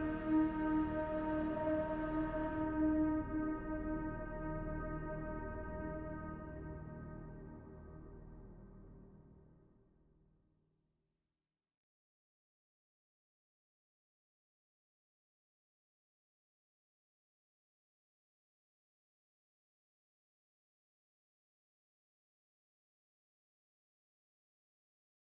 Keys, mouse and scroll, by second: 0.8-1.3 shift+middle drag, 1.5-3.0 middle drag, 3.2-3.8 shift+middle drag, 4.9 click, 6.2-6.6 scroll up 1, 6.6-8.0 middle drag, 8.4-9.0 shift+middle drag, 10.2-11.8 middle drag, 12.1-12.7 shift+middle drag, 14.6-16.4 drag, 17.9 middle click, 18.6-19.4 scroll up 1, 19.9-20.9 shift+middle drag, 21.4 scroll down 1, 21.9 middle click, 23.2 click.